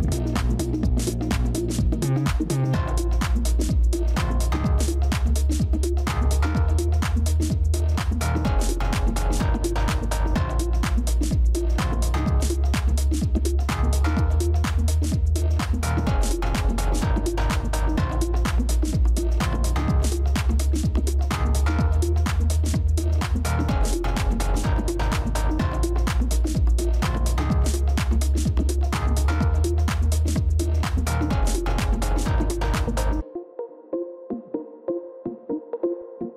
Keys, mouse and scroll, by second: 4.0 ctrl++, 4.2 ctrl++, 8.2 ctrl+-, 8.4 ctrl+-, 9.2 ctrl+-, 10.0 right click, 23.7 ctrl++, 23.9 ctrl++, 24.0 ctrl++, 29.2 ctrl+], 32.6-34.7 ctrl+[, 34.9 ctrl+[, 35.1 ctrl+[.